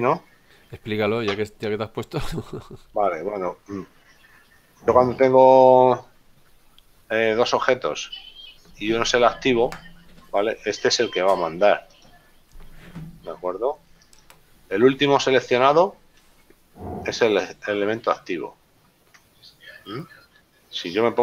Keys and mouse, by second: 2.3 z, 3.3 right click, 7.5 click, 14.1 shift+right click.